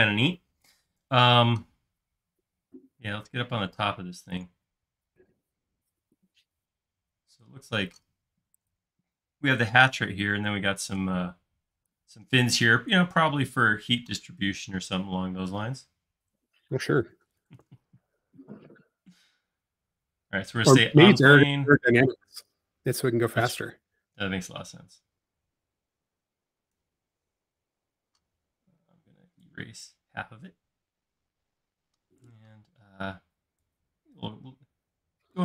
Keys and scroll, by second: 18.5 c, 27.9-30.7 typing, 32.8 p.